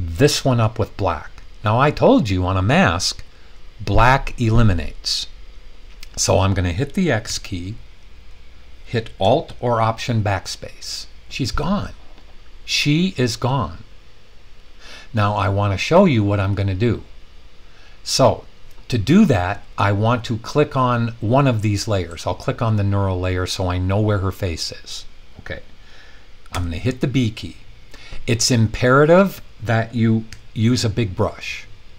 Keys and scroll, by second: 7.2 x, 10.3 alt+BackSpace, 26.5 b, 30.3 [.